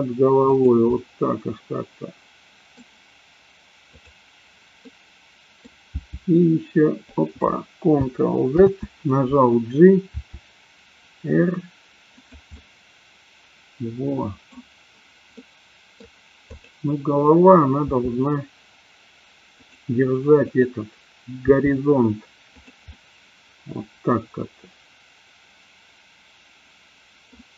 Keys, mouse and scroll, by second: 0.6 click, 0.9-2.8 middle drag, 3.8 click, 4.8 middle click, 6.3 g, 8.9 ctrl+z, 10.2 r, 12.3 drag, 12.6-14.7 middle drag, 15.4-16.1 middle drag, 17.9 r, 19.8 click, 21.6 r, 22.7 click, 22.9-27.3 middle drag.